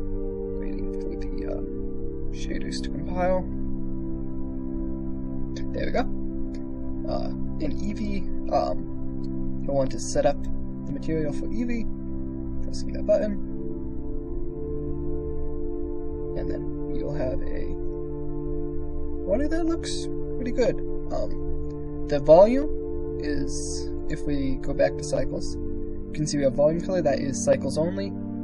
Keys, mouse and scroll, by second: 6.3 click, 10.0-13.6 drag, 15.8 click, 16.8 click, 17.8 KP_0, 23.7-24.9 drag.